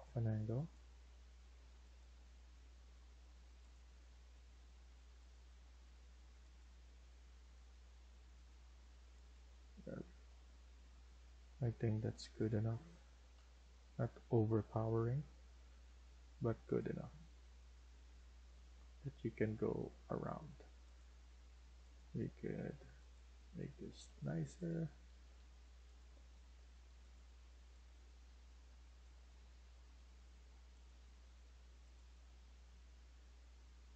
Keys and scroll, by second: 3.8 Escape, 9.5 Escape, 9.9 Escape, 10.8 Escape, 13.6 Right, 14.4 Escape, 17.0 Escape, 17.4 Escape, 23.8 Delete, 24.9 Escape, 25.2 Escape, 26.3 Escape, 26.6 Escape, 29.0 Escape, 29.4 Escape.